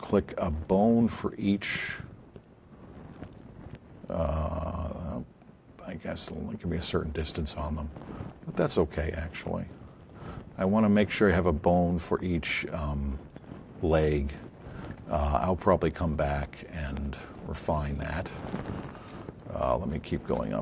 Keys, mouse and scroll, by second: 3.1 click, 6.1 click, 10.1 click, 13.3 click, 15.8 click, 16.6 click, 19.2 shift+click.